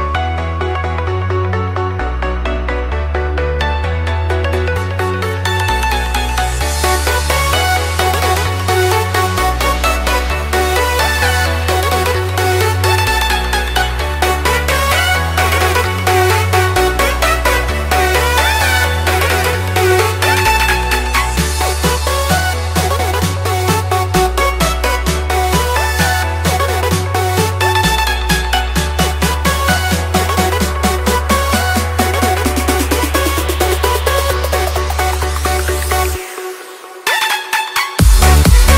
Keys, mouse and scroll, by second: 0.1-5.0 drag, 7.3-8.7 drag, 10.6-13.2 typing, 14.1 click, 15.4 right click, 16.9 click, 18.1 ctrl+c, 18.2 click, 18.3 v, 19.0 click, 20.4-23.0 typing, 23.0 Return, 24.5 click, 25.1-26.6 typing, 27.1 Return, 27.9 click, 28.3 right click, 29.0 click, 30.4-31.4 typing, 31.4 Return, 32.6-34.7 drag, 37.2 right click.